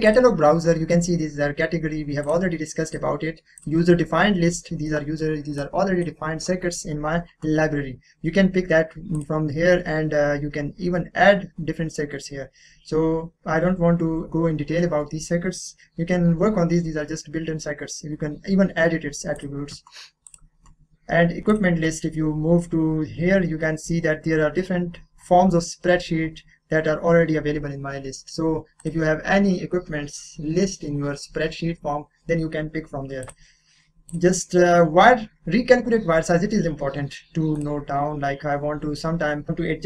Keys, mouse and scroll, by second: 2.2 click, 4.8 middle click, 5.6-7.8 drag, 9.2 click, 19.4 click, 19.7 click, 23.9 scroll down 1, 24.9 scroll, 25.9 scroll down 1, 27.2-28.8 scroll up 1, 28.8 click, 29.7 click, 33.2 click, 37.6 click, 38.2-39.4 scroll up 1.